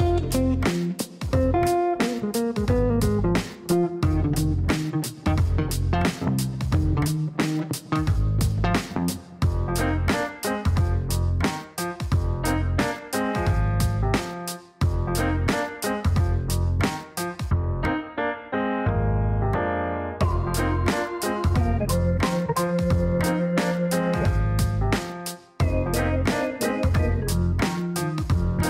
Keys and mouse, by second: 0.0-1.2 typing, 1.6 Down, 2.5-3.4 typing, 3.5 Down, 3.7 Down, 5.5 KP_Multiply, 5.8 KP_2, 6.0 KP_Enter, 7.4 click, 8.4 click, 10.4 click, 12.9 click, 13.4 middle click, 14.6 click, 15.3 click, 15.8 right click, 17.2 click, 18.8 middle click, 21.5 middle click, 26.6 middle click, 28.1 click.